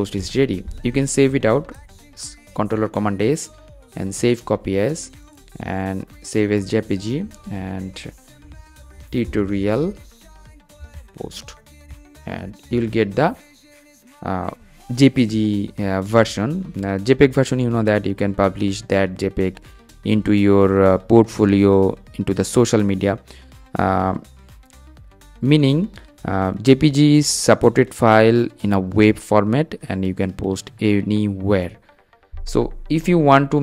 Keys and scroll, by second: 1.5 shift+super+s.